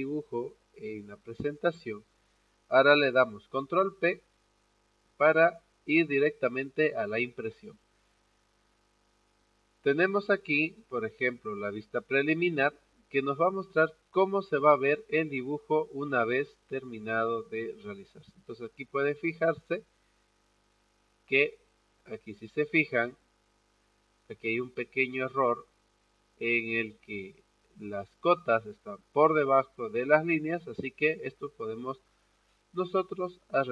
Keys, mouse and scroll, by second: 12.5 click, 21.8-33.7 drag.